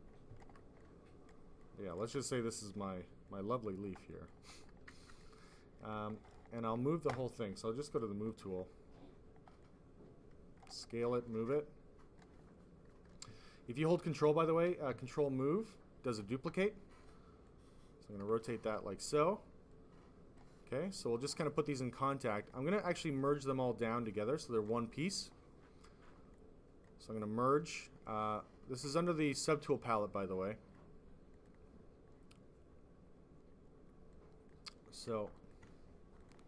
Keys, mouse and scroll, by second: 0.7 click, 1.5 click, 2.1 click, 3.2 click, 4.0 click, 4.2 click, 5.0 alt+click, 5.4 click, 6.1 alt+click, 7.8 click, 8.1 click, 8.2 click, 9.5 double click, 11.2 click, 13.7 ctrl+click, 14.5 ctrl+z, 14.9 ctrl+click, 17.4 click, 18.5 w, 19.6 click, 22.2 click, 23.5 click, 26.2 click, 29.2 click, 31.2 click, 31.8 click, 34.0 click, 35.2 ctrl+click, 35.4 click, 36.1 click, 36.3 click.